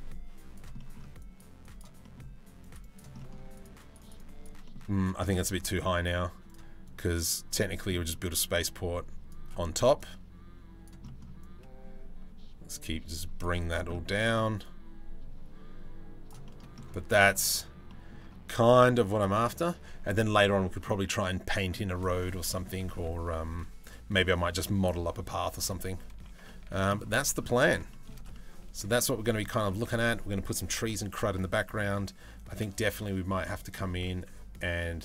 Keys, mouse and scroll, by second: 0.4 middle click, 0.8 middle click, 1.2 middle click, 1.6 middle click, 2.2 middle click, 2.4 middle click, 2.8 middle click, 3.2 click, 3.4 click, 3.8 click, 4.3 middle click, 6.1 click, 6.6 click, 7.5 middle click, 7.9-8.9 drag, 9.2 middle click, 9.6 click, 10.7 middle click, 11.0-13.0 drag, 13.2 click, 13.5 middle click, 14.2-15.9 drag, 16.1 middle click, 16.7 shift+middle click, 17.5 middle click, 21.7 middle click, 22.1 shift+middle click, 24.4 middle click, 26.1 shift+middle click, 26.8 middle click, 27.5 shift+middle click, 27.9 middle click, 28.6 shift+middle click, 31.3 middle click, 33.2-34.2 middle drag.